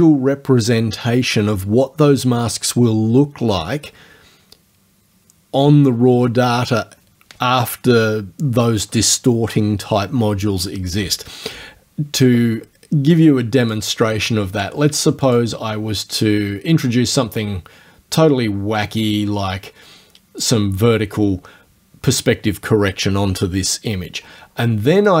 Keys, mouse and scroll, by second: 13.7 click, 15.3 click, 17.1-20.6 drag, 25.0 click.